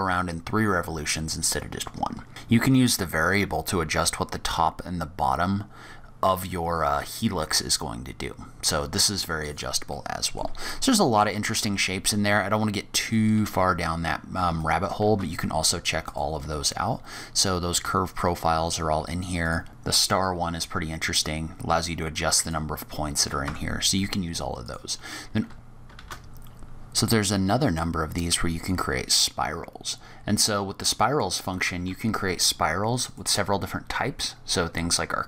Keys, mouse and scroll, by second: 9.9 middle click, 10.5-11.1 scroll down 4, 11.1 click, 11.5 Tab, 11.8-12.8 scroll down 2, 13.0 click, 13.6-14.1 scroll up 4, 14.5 shift+right click, 14.9 shift+a, 19.7-20.1 scroll up 8, 20.1 click, 22.8-23.2 scroll down 3, 23.2-23.7 scroll up 2, 23.4 Tab, 23.7-24.1 scroll down 4, 24.0-24.5 scroll up 2, 24.5 click, 25.5 click, 25.5 scroll down 12, 25.9 shift+a, 29.4-29.9 scroll down 6, 29.9-31.4 scroll up 15, 33.0 click.